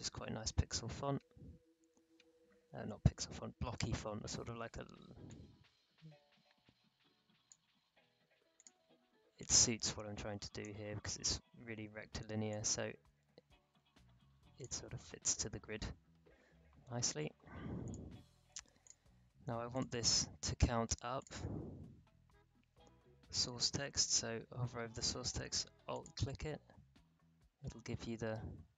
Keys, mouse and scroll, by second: 1.1 1, 2.8 ctrl+a, 5.2-11.0 drag, 11.0-11.6 alt+scroll up 1, 11.6-12.3 alt+scroll down 1, 12.5-14.9 drag, 14.9 alt+scroll down 1, 17.8 click, 25.9 alt+click.